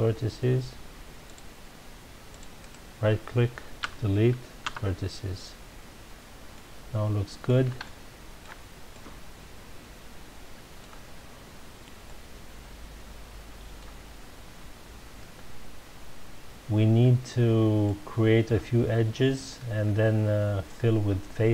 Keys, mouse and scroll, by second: 1.5-2.6 middle drag, 2.7 right click, 3.8 Delete, 5.3 Return, 6.1-6.5 scroll down 2, 6.5-11.9 middle drag, 12.0-15.1 middle drag, 17.8-20.8 middle drag.